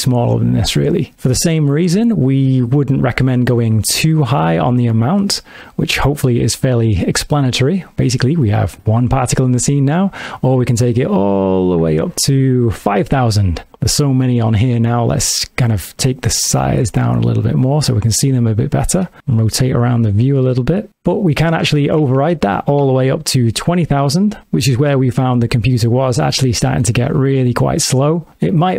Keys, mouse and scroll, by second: 4.0 click, 10.2 click, 16.4 shift+click, 19.2 middle click, 20.9 BackSpace, 22.2 KP_0, 22.3 KP_0, 24.8 middle click, 27.3 space.